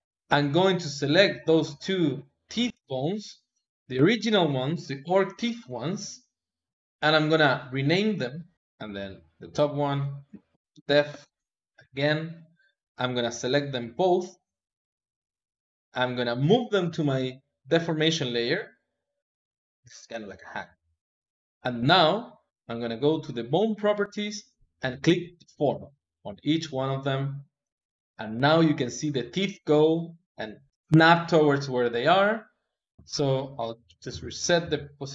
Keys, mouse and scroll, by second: 0.2 click, 0.6 click, 1.7 ctrl+Tab, 2.4 click, 5.7 click, 6.7-8.5 drag, 9.0-12.0 drag, 13.6 shift+click, 15.4 click, 16.7 m, 19.8 click, 22.1-24.9 drag, 26.1 click, 27.5 click, 32.6 click, 33.0 ctrl+Tab, 34.0 s, 34.5 a.